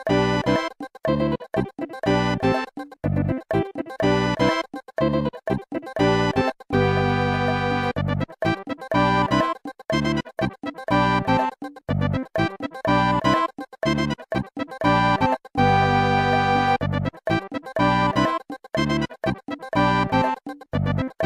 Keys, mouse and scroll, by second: 1.3 click, 1.8 typing, 2.2 click, 6.3 click, 6.8-7.7 typing, 8.3 click, 9.1 click, 9.9 scroll down 2, 10.4 ctrl+s, 10.6 click, 15.8 scroll down 1, 18.2 ctrl+s, 18.4 click, 19.9 8.